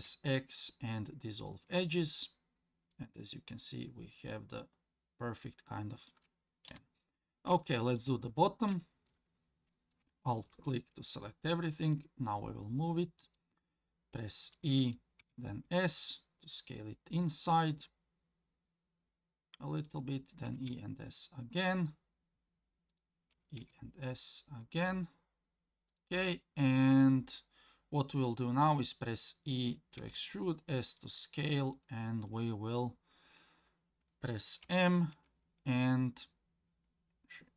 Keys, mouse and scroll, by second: 2.0 scroll down 2, 2.9-6.1 middle drag, 6.7 KP_1, 7.6 shift+middle click, 8.3-8.8 scroll up 3, 8.8 shift+middle click, 10.4 alt+click, 11.9-13.4 middle drag, 14.5 e, 20.4 e, 23.3 e, 28.8 e, 31.7-34.6 right drag, 34.6 m.